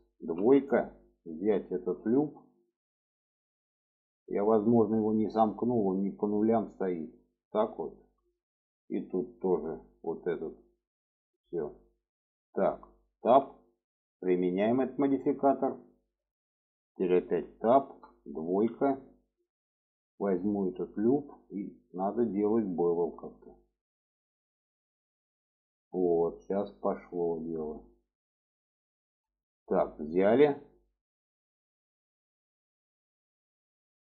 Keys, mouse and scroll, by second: 0.2 Tab, 0.5 click, 0.8 middle click, 2.3 alt+shift+click, 3.5 click, 3.9 middle click, 5.8-6.9 drag, 7.5 middle click, 9.0 alt+shift+click, 9.9-11.0 drag, 11.3 click, 12.7 middle click, 13.0 Tab, 14.2-14.8 drag, 15.4-16.2 middle drag, 17.1 Tab, 17.6 shift+middle click, 18.3 2, 19.6 alt+shift+click, 21.4 click, 22.3 shift+middle click, 23.6 shift+middle click, 24.1 middle click, 24.9-30.3 drag, 30.3 middle click, 31.8 middle click, 33.1 middle click.